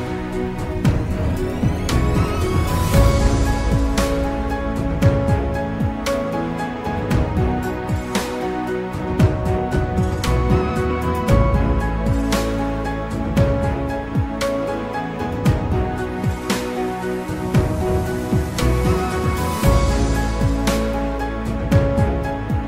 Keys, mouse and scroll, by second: 2.9-4.8 scroll up 4, 5.9 ctrl+b, 14.6-17.8 drag.